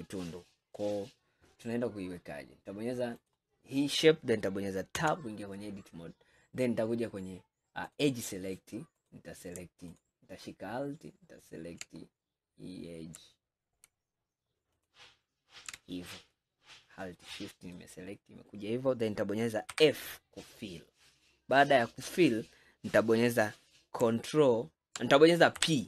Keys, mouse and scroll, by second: 1.3 scroll down 2, 2.0-3.2 scroll up 2, 3.2 click, 5.0 Tab, 8.0 click, 9.0 click, 10.0 alt+click, 12.1-12.4 scroll down 2, 12.8-14.8 scroll up 1, 14.8 alt+shift+click, 16.4-19.4 middle drag, 19.8 f, 25.6 p.